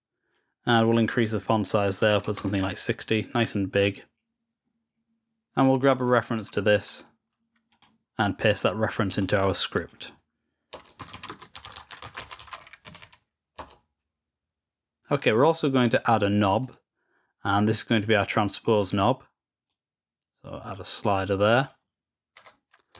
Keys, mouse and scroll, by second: 1.0 click, 5.9 right click, 7.6 click, 9.7 click, 15.7 click, 16.6 right click, 18.7 click, 19.6-20.7 drag, 21.5 click.